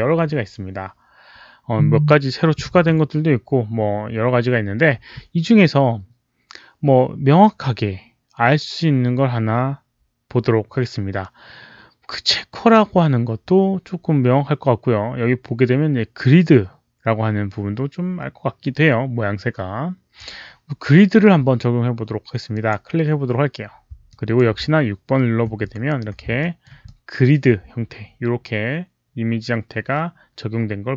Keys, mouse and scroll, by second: 22.4 click, 24.0-24.3 alt+drag, 25.4 6, 26.3 alt+middle click, 26.7-27.3 alt+drag.